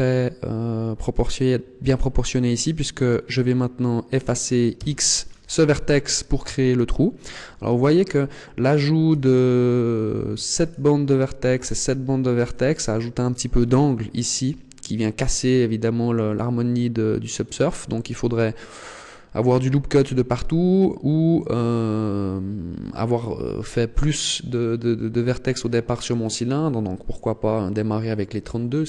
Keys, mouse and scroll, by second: 2.5 right click, 4.7 x, 5.7 middle click, 9.1 alt+right click, 10.5 alt+shift+right click, 11.4 alt+shift+right click, 12.7 middle click.